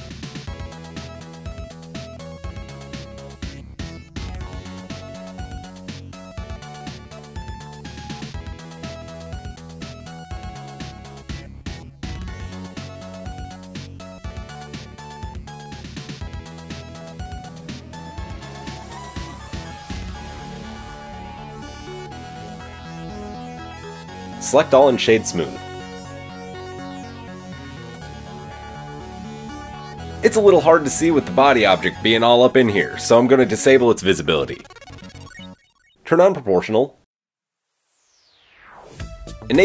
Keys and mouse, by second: 0.2 alt+click, 0.4-1.0 alt+middle drag, 1.2 alt+shift+click, 2.2 alt+click, 2.9 alt+shift+click, 4.5 x, 5.6 drag, 6.0 shift+click, 6.3 shift+click, 7.2 ctrl+l, 8.5 x, 9.1-10.9 shift+middle drag, 10.9 click, 11.0-20.0 middle drag, 15.4 Tab, 20.0-30.4 drag, 23.9 Tab, 24.3 a, 26.4 Tab, 27.6 KP_3, 30.4-32.4 middle drag, 32.4 click, 32.5 middle click, 33.3 click, 34.2 Tab, 34.8 alt+click, 35.9-37.2 middle drag, 37.2 o, 38.1-39.6 middle drag.